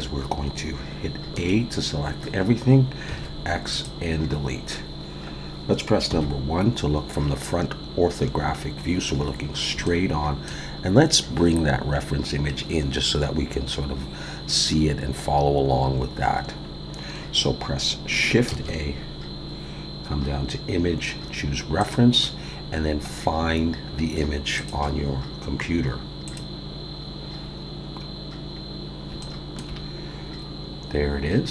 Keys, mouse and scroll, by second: 1.3 a, 3.1 x, 6.1 KP_1, 8.8-9.2 scroll up 1, 9.5-9.8 scroll up 2, 9.8 shift+middle click, 14.2-15.1 scroll down 1, 18.5 shift+a, 27.5-28.4 scroll up 5, 28.5 scroll down 1, 29.2 shift+middle click, 31.3-31.5 scroll up 1.